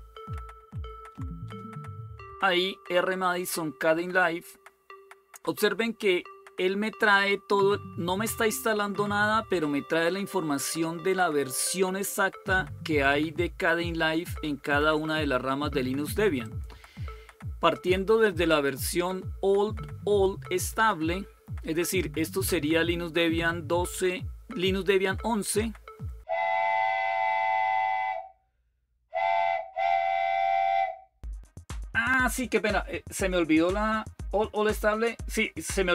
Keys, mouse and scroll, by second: 0.4 ctrl+-, 1.2 Return, 16.2 click, 29.8 click, 30.7 click, 32.3 click.